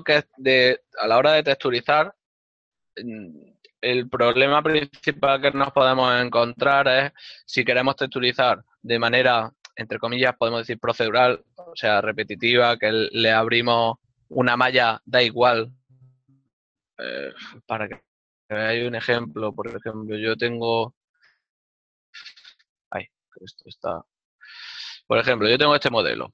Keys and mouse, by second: 19.9 click.